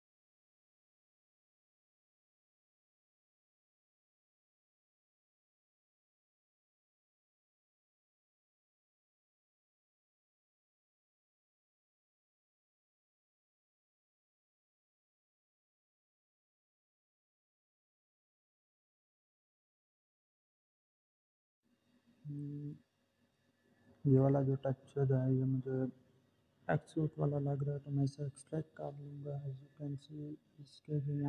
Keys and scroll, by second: 3.1-4.2 typing.